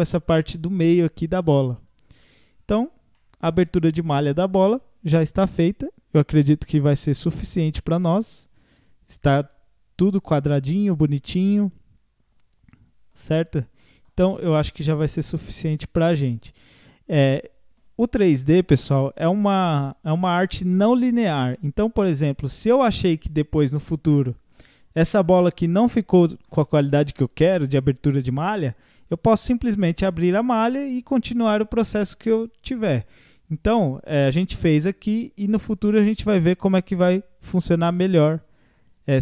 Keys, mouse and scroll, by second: 2.6-3.2 scroll down 1, 3.2-4.7 middle drag, 4.7 scroll down 1, 5.1-7.1 middle drag, 7.1 scroll up 3, 7.4-10.4 middle drag, 13.5 scroll up 1, 13.8 middle click, 14.3 Tab, 14.6 scroll down 2, 15.0-16.6 middle drag, 16.6 ctrl+s, 22.2 scroll up 2, 22.7-25.7 middle drag.